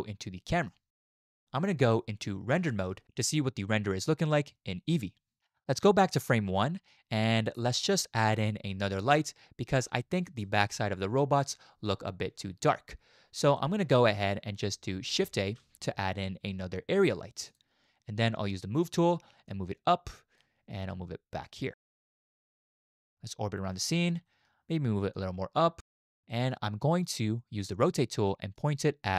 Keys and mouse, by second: 0.6 click, 2.5 z, 6.2-8.0 drag, 10.2 shift+click, 13.6 shift+click, 15.4 shift+a, 17.8 shift+a, 19.8 click, 21.6-22.7 drag, 23.1-23.8 drag, 23.8-24.2 shift+middle drag, 24.4 click, 25.2 click, 26.3 shift+click, 26.7 middle click, 27.8 click, 28.3 click.